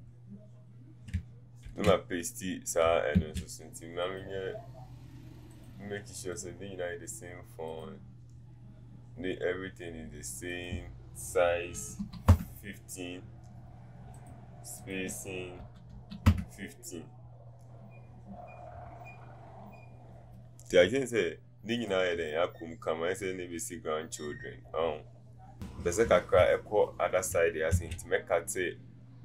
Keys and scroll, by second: 11.8 KP_1, 15.6 KP_1, 16.1 KP_5.